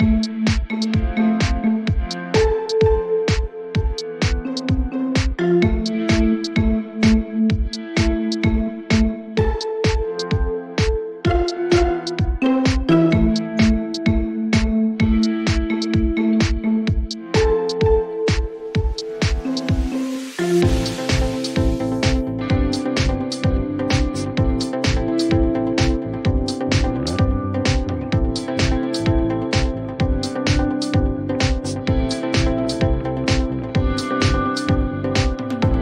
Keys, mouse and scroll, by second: 1.1 click, 2.7 click, 3.8-4.7 typing, 7.2 click, 13.8 click, 16.5 click, 22.6 click, 24.3 click, 28.2 click, 29.7 click, 32.8 click, 35.6 click.